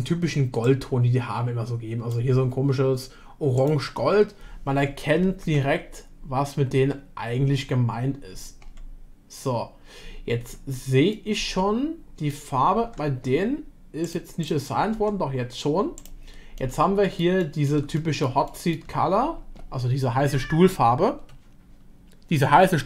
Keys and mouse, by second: 5.5 Tab, 11.1-12.3 middle drag, 12.8 Tab, 14.9 Tab, 15.9 click, 16.6-17.7 middle drag, 17.9 middle click, 18.4-18.7 shift+middle drag.